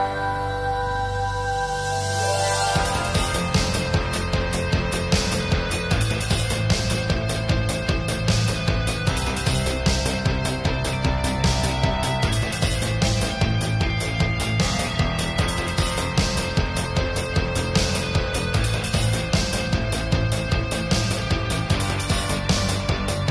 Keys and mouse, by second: 0.5-1.9 middle drag, 3.3 ctrl+s, 4.4 a, 4.5 a, 5.4 ctrl+s, 7.3 middle click, 8.1-9.1 middle drag, 9.9 ctrl+s, 11.6-12.1 drag, 12.7 click, 13.6-13.9 drag, 13.9 ctrl+s, 15.1-15.6 drag, 15.8 click, 16.4-17.0 drag, 17.4-18.4 drag, 18.6 click, 18.9 middle click, 19.4-20.1 drag, 20.1-20.6 middle drag, 20.8 middle click, 21.3 click, 21.7 click, 22.1-23.3 middle drag.